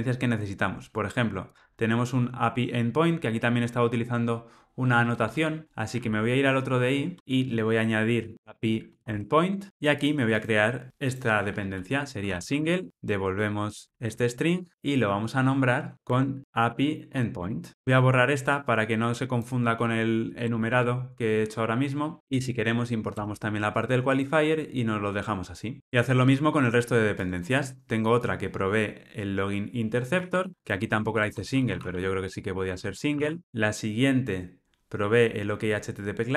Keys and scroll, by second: 8.3 alt+super+], 9.6 Tab, 9.7 alt+super+[, 12.9 Return, 14.0 super+c, 16.0 super+v, 22.2 alt+Return, 30.1 super+c, 33.0 super+v, 33.4 alt+super+l.